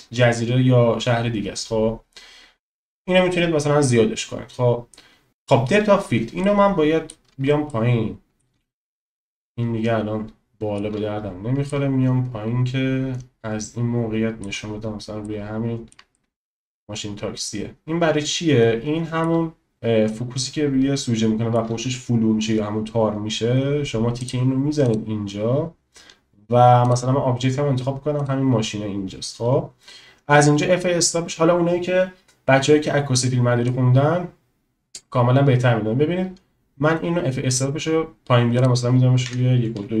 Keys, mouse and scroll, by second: 6.4-7.1 shift+drag, 7.7 shift+middle click, 8.8 shift+middle click, 11.8 shift+middle click, 15.4 middle click, 16.3 shift+click, 19.8 shift+middle click, 24.3 click, 24.9 click, 26.8 click, 33.6-37.7 drag, 38.5-40.0 drag.